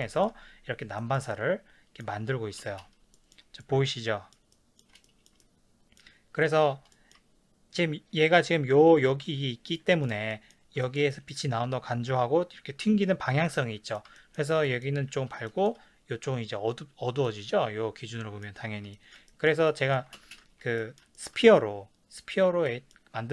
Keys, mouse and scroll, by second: 2.6 ctrl+space, 8.4 s, 9.0 click, 9.2 g, 9.8 click, 10.0-23.3 ctrl+middle drag, 20.2 ctrl+space.